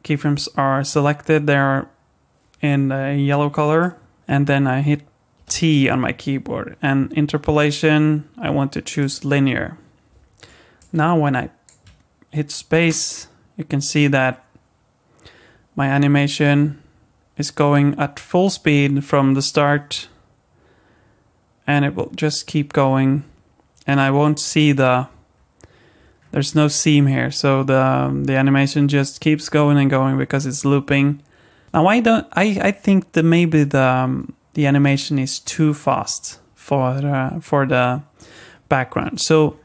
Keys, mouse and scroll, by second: 3.8 click, 5.3 t, 10.8 click, 12.8 space, 24.6-25.3 scroll up 1, 25.3-25.6 scroll down 1, 25.6-26.7 scroll up 5, 26.7-27.4 scroll down 1, 27.4-28.3 scroll down 3, 28.5 scroll down 1, 31.6 space, 39.3-39.6 scroll down 18.